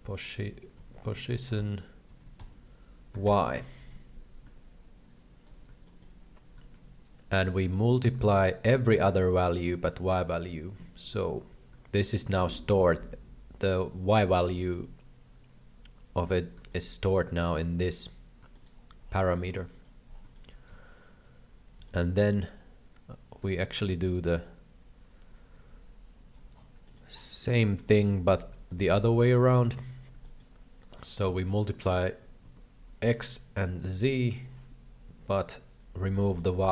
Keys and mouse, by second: 0.6 BackSpace, 5.8 shift+middle click, 7.1-7.9 drag, 8.3 shift+middle click, 9.8-11.0 drag, 12.0 shift+middle click, 16.8 shift+middle click, 18.5 shift+middle click, 19.7 click, 20.4 shift+click, 20.7 alt+a, 20.7 b, 21.8 c, 23.6 middle click, 24.1-26.3 ctrl+drag, 26.9 shift+middle click, 27.6 alt+a, 28.0 middle click, 28.4 right click, 28.8 middle click, 29.3 shift+d, 30.3 shift+middle click, 31.0 click, 32.0-33.9 drag, 32.4 KP_1, 34.3-35.8 drag, 36.3 shift+middle click.